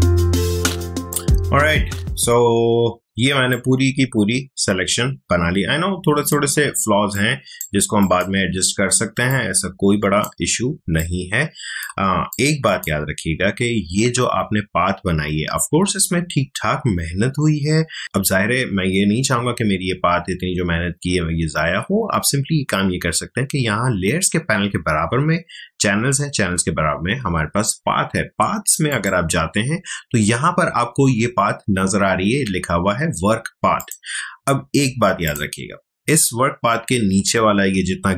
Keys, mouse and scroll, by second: 0.2-3.2 ctrl+drag, 3.2 space, 3.5-10.8 ctrl+drag, 10.8 ctrl+space, 11.0 ctrl+click, 11.3 ctrl+space, 12.3 click, 12.4 space, 18.0 click, 28.9 click, 33.8 click.